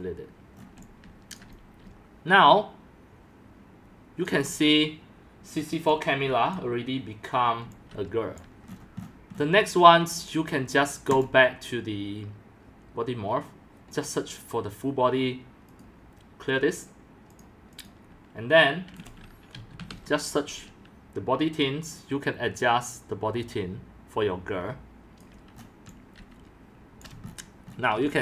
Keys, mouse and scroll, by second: 0.6 scroll up 1, 0.6-4.2 typing, 0.7 middle click, 0.7 scroll, 1.4 click, 2.5-5.5 drag, 5.5-6.4 typing, 5.5 scroll, 6.6 click, 8.0 c, 8.4 click, 8.7-9.1 scroll down 13, 9.1 scroll, 9.3-11.2 scroll down 7, 11.2 click, 13.9 click, 14.6-17.1 drag, 17.8 click, 19.3-20.4 typing, 23.6 typing, 25.1 click, 25.6-28.2 typing, 25.6 scroll, 25.7 scroll, 27.2 click, 27.3-28.0 shift+middle drag.